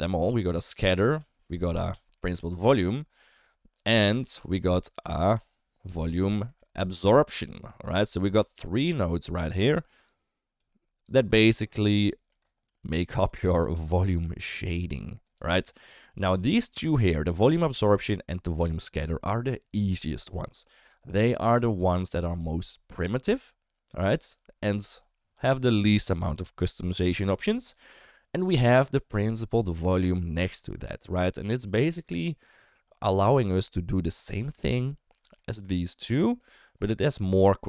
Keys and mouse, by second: 0.6 shift+a, 2.3 Down, 4.0 shift+a, 6.4 Down, 8.4 click, 8.5 click, 9.1 middle click, 9.7 click, 10.6 click, 11.1 g, 12.1 shift+middle click, 12.6 g, 13.2 click, 13.5 click, 13.7 g, 16.1 click, 28.0 shift+middle click, 29.7 shift+middle click, 31.2 shift+middle click, 35.2 shift+middle click, 36.4 shift+middle click, 37.2 shift+middle click.